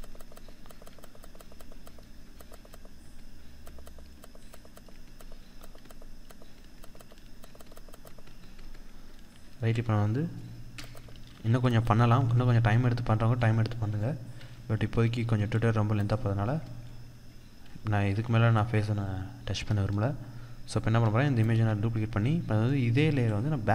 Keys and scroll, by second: 10.5 ctrl+=, 17.5 ctrl+-, 19.7 ctrl+-, 20.9 ctrl+j, 22.5 ctrl+-.